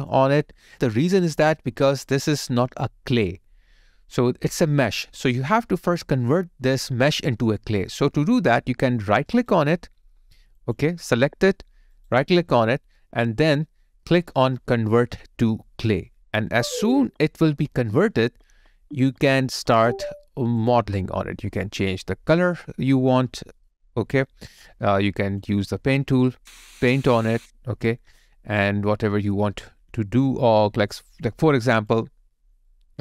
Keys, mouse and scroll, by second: 0.1 double click, 9.3 right click, 11.1 double click, 11.9 right click, 30.0 ctrl+right click, 32.5 ctrl+right click.